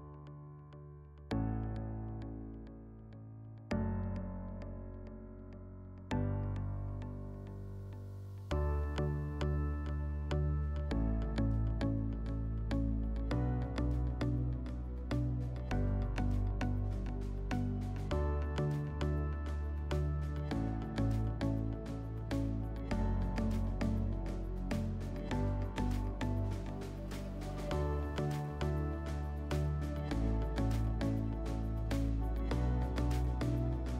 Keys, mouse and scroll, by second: 0.0 click, 2.4 click, 3.5 click, 5.5 click, 6.1 click, 9.8 click, 11.0 click, 13.6 click, 15.1 click, 15.4-16.9 drag, 17.5-18.8 drag, 20.4 click, 23.2 click, 25.8 click, 27.1 right click, 27.3 w, 30.2 click, 31.1 scroll, 32.6 middle click.